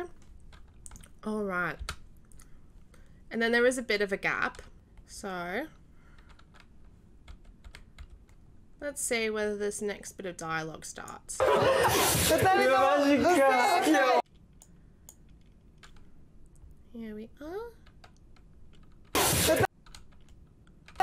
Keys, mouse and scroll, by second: 1.8 g, 7.2 f, 7.9 f, 10.0-11.3 drag, 11.3 s, 13.7 click, 14.6 click, 19.1 q, 20.9 s.